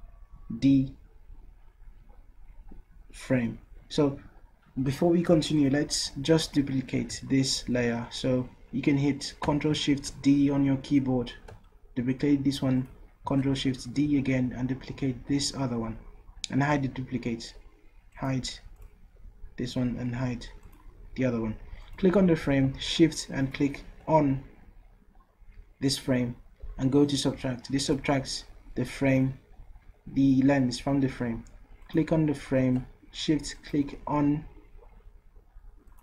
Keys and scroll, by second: 10.1 ctrl+shift+d, 13.9 ctrl+shift+d.